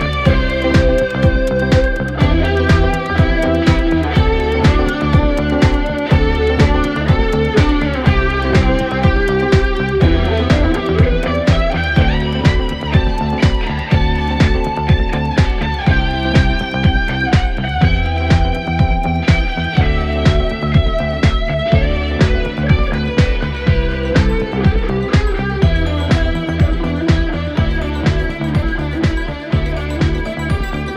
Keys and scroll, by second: 22.8 4, 27.4 3.